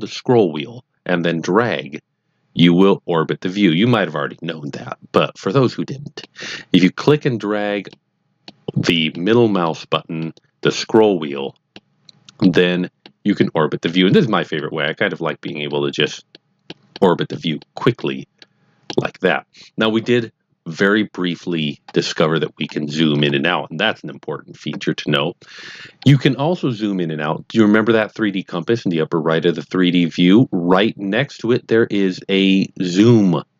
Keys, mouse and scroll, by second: 0.8 middle click, 7.3-8.0 middle drag, 8.4-9.4 middle drag, 9.6-11.0 middle drag, 12.4 middle click, 13.4 middle click, 14.1 middle click, 14.8 middle click, 15.7 middle click, 16.3 middle click, 16.9 middle click, 17.7 middle click, 18.4 middle click, 22.5 scroll down 2, 22.6-22.9 scroll up 2, 22.9 scroll down 2, 23.1 scroll up 1, 23.6-25.8 scroll down 1.